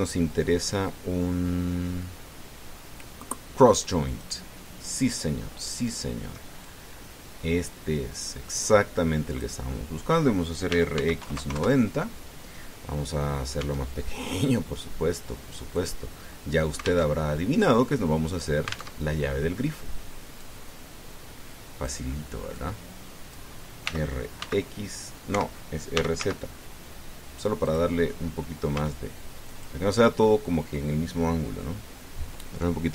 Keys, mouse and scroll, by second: 4.8 click, 5.7-6.0 scroll down 2, 7.5-8.6 drag, 9.3-10.4 drag, 11.5 r, 11.7 x, 12.0 KP_9, 12.1 KP_0, 12.4 KP_Enter, 14.4 s, 16.6 click, 17.9 alt+Tab, 19.8 alt+Tab, 21.2-22.8 drag, 23.3 click, 24.6 r, 25.2 x, 26.1 Escape, 26.7 r, 27.0 z, 28.4 click, 28.8 middle click, 29.5 s, 30.3 click.